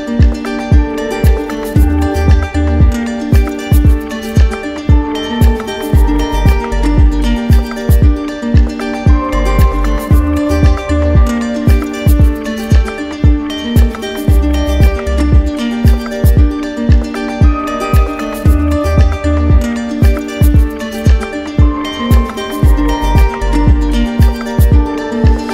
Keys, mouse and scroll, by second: 0.2 alt+right click, 0.3 alt+right click, 1.0 right click, 2.1 alt+right click, 3.0 right click, 3.6 alt+right click, 6.8 middle click, 9.1 click, 10.1 alt+right click, 10.9 right click, 11.4 right click, 11.9 alt+right click, 12.6 right click, 13.1 alt+right click, 14.2 right click, 15.4 click, 17.2 click, 19.2 right click, 19.7 shift+right click, 22.5 click, 23.3 right click, 23.8 right click, 24.5 d, 24.6 d.